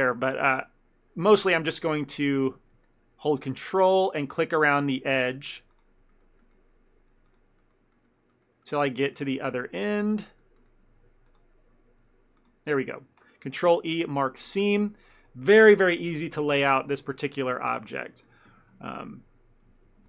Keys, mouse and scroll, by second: 1.3 middle click, 1.5 ctrl+middle click, 2.0 shift+click, 2.4 ctrl+middle click, 2.8 shift+middle click, 3.4 ctrl+click, 3.7 middle click, 4.1 shift+middle click, 4.9 ctrl+click, 5.3 shift+middle click, 5.7 ctrl+click, 6.2 shift+middle click, 7.3 ctrl+click, 7.7 shift+middle click, 9.2 ctrl+click, 9.7 middle click, 10.3 shift+middle click, 11.3 ctrl+click, 13.5 ctrl+e, 15.6 a, 15.7 a, 16.2 ctrl+middle click, 17.0 shift+middle click, 17.2 ctrl+middle click, 17.6 middle click, 17.8 ctrl+middle click, 18.2 shift+middle click, 18.5 Tab, 19.1 z, 19.7 a, 19.8 a.